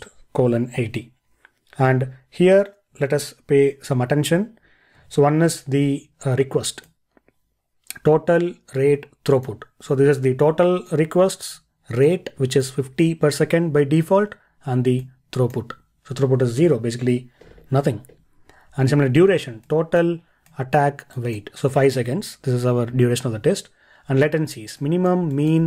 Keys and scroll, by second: 5.0 ctrl+e.